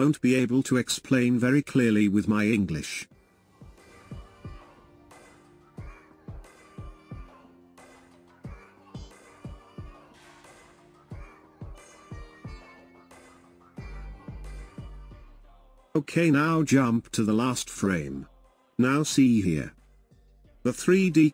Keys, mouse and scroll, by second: 5.0 click, 6.6 click, 7.2-10.3 drag, 14.1-17.1 drag, 18.3-21.3 drag.